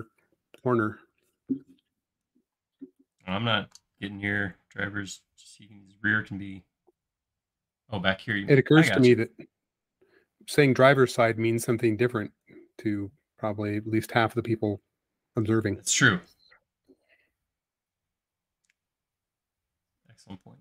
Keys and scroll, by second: 0.8 p, 2.6-3.6 typing, 10.4 e, 12.1 typing, 13.6 typing, 14.7 super+z, 15.4 space, 17.8 e, 18.4 space.